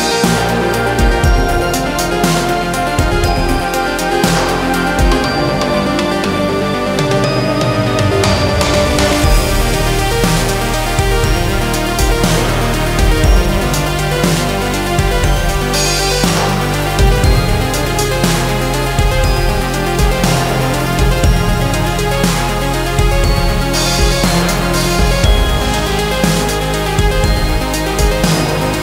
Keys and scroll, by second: 1.2 Escape, 6.6 Escape, 13.1 space, 28.7 F2.